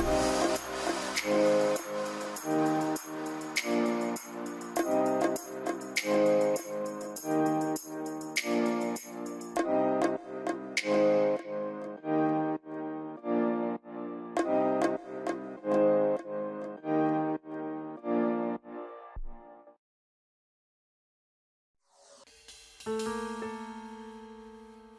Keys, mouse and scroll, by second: 12.9 middle click, 13.3 scroll up 1, 16.5 scroll down 1, 16.9 middle click, 17.1 scroll up 1.